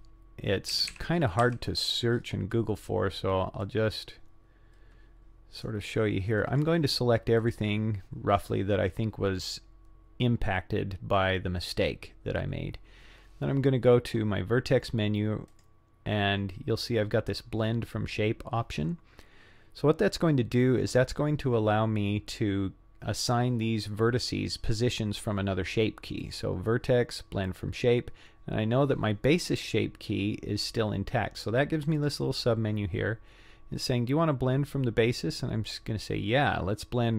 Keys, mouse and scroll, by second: 0.7 a, 0.9 a, 1.4 c, 15.5-23.4 drag, 26.2-27.6 drag, 32.0 click.